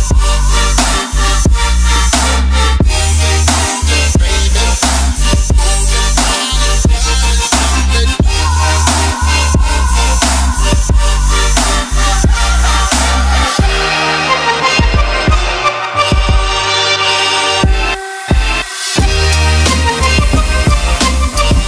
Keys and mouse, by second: 0.0 middle click, 0.3 middle click, 0.8 middle click, 3.0 middle click, 4.0 c, 4.1 ctrl+middle drag, 4.4 shift+middle drag, 5.6 click, 6.5 ctrl+middle click, 6.9 middle click, 12.6-14.2 drag, 14.2 right click, 15.1 click, 15.8-17.4 right drag, 16.4 KP_0, 19.1 middle click, 19.5 ctrl+middle click, 20.3-21.6 drag.